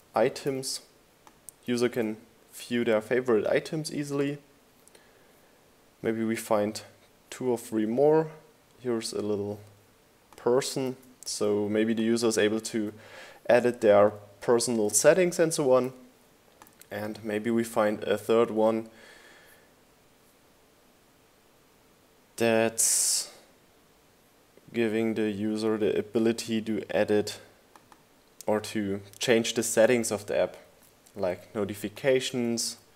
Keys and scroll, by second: 1.5 super+v, 10.2 super+c, 12.1 super+v, 30.0 super+c, 31.5 super+v.